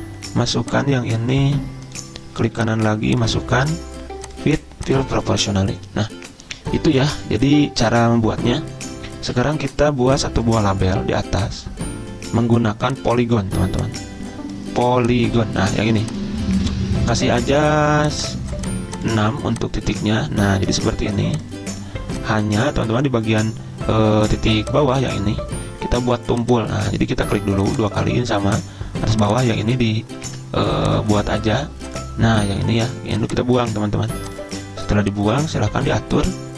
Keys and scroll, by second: 9.4 z, 30.4 ctrl+z.